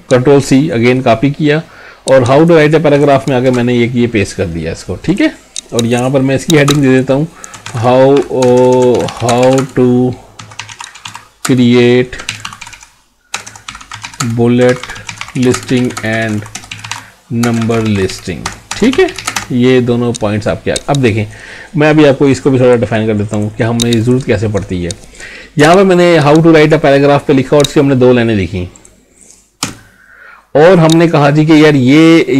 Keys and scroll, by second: 3.4 ctrl+v, 9.3 space, 9.6 space, 11.4 space, 14.2 space, 15.5 space, 16.0 space, 17.4 space, 19.2 space.